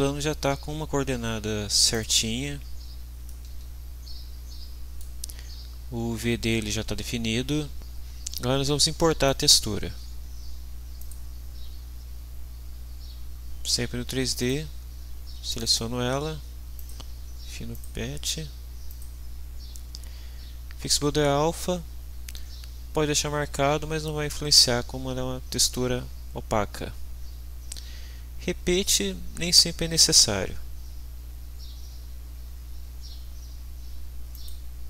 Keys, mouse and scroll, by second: 1.9 click, 3.0 scroll up 2, 3.3-5.2 middle drag, 9.3 click, 11.0 click, 14.4 click, 15.5 click, 16.8 click, 17.7 click, 18.9 click, 27.1 scroll down 1, 32.4-32.7 scroll down 2, 32.9 scroll up 2, 34.3 click.